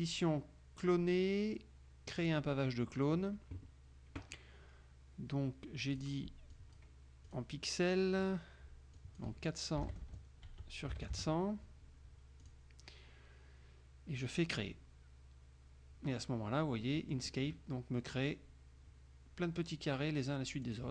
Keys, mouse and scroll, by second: 2.3 click, 6.1 click, 6.7 click, 7.4 click, 8.3 click, 9.1 click, 9.9 KP_0, 10.6 Tab, 11.0 KP_0, 12.5 click, 14.7 click, 16.9 middle click, 20.8 click.